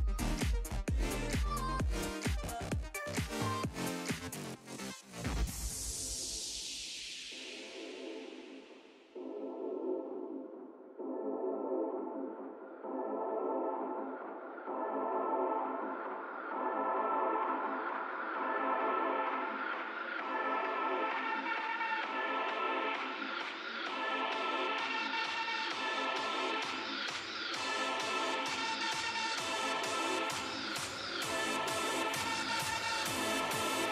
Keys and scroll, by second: 27.7 s.